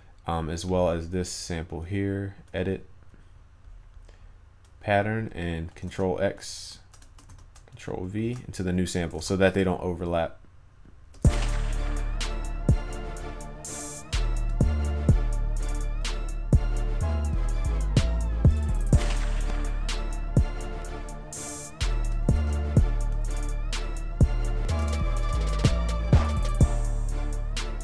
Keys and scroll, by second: 6.0 ctrl+x, 8.3 ctrl+v, 13.2 ctrl+s, 19.4 ctrl+s.